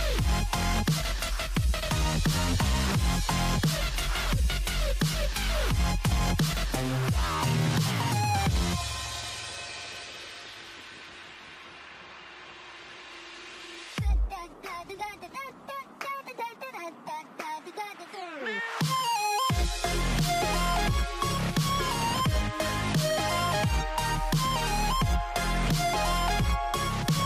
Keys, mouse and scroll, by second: 7.1 click, 7.9 click, 9.1-10.3 scroll down 1, 10.3 click, 10.8-11.5 scroll up 3, 12.0 click, 13.3-14.9 drag, 14.9 Tab, 15.7 click, 17.2 a, 17.8-18.9 scroll down 2, 18.9 p, 20.9 Tab, 21.8 click, 22.8 click, 24.2 h, 25.2 click.